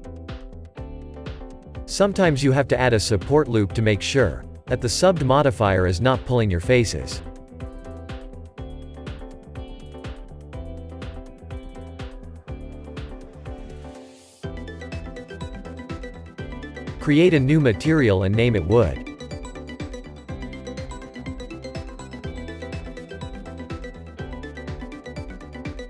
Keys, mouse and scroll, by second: 3.0 middle click, 3.6 ctrl+r, 9.7-10.1 scroll down 3, 10.1 middle click, 10.4 Tab, 10.8 click, 11.1-13.6 shift+middle drag, 13.6 click, 15.0 click, 16.9-19.6 drag, 19.6 o, 21.7 middle drag, 21.9 click, 23.5-25.4 middle drag, 25.4-25.8 drag.